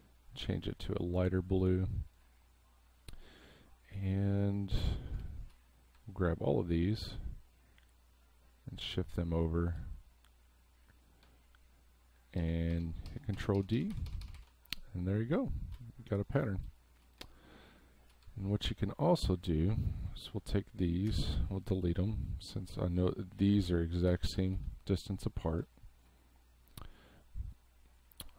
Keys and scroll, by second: 0.9 space, 5.2 space, 12.4 ctrl+d, 17.7 space, 21.1 Delete, 24.2 space, 25.7 space.